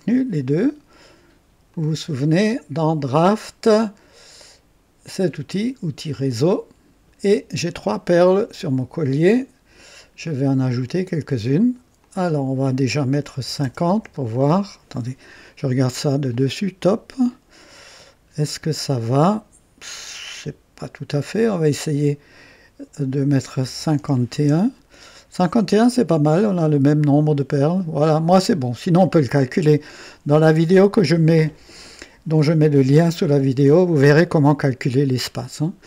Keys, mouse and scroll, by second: 3.2 click, 6.1 click, 7.6-7.9 scroll down 1, 8.1-8.8 right drag, 10.7-11.5 drag, 12.0 click, 13.3 KP_5, 13.6 KP_0, 13.8 KP_Enter, 16.2 click, 17.1 right click, 17.8-18.2 scroll up 1, 18.5-20.2 right drag, 21.4 click, 23.6 KP_5, 23.9 KP_1, 24.3 Return.